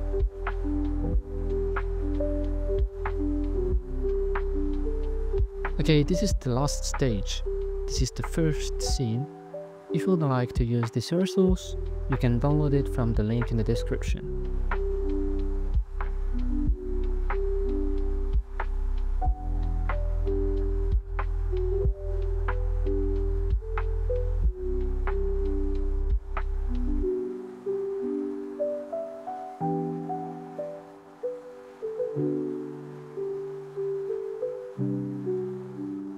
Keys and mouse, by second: 1.2 a, 1.7 ctrl+p, 3.7 g, 4.3 z, 5.0 r, 5.2 r, 14.9-15.5 drag, 21.9 click, 27.9 middle click, 31.0 right click, 31.4 r, 31.5 r, 34.0 g, 34.2 z, 34.8 r, 34.8 a.